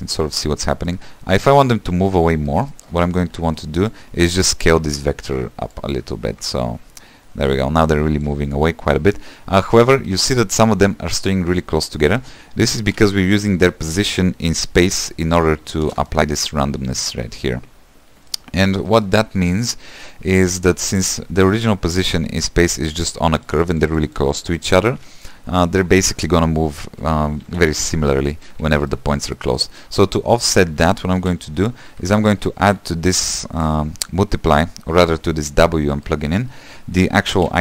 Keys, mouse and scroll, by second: 0.3-2.1 middle drag, 2.1-2.4 scroll down 4, 2.4 shift+middle click, 3.1-3.6 scroll up 5, 3.6 click, 4.2 shift+d, 5.0-9.6 drag, 9.7-12.8 middle drag, 15.9 space, 21.5-33.4 drag, 33.4 q.